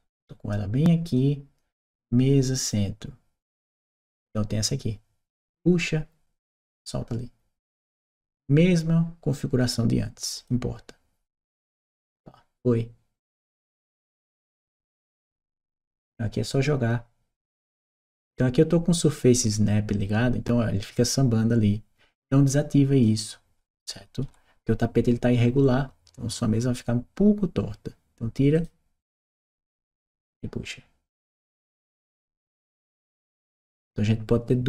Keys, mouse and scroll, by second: 0.9 click, 2.3 click, 2.5 click, 5.3-6.6 drag, 10.2 click, 13.4 click, 14.7 click, 16.5-22.9 drag, 29.1 click, 30.1-32.0 drag, 33.5-34.6 drag.